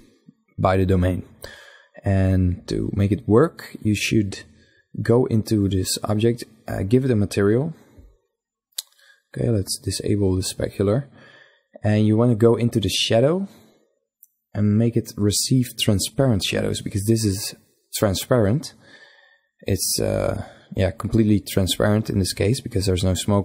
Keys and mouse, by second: 2.0-4.0 right drag, 6.8-8.3 drag, 8.4-10.2 drag, 12.3-14.1 drag, 14.6-16.2 drag.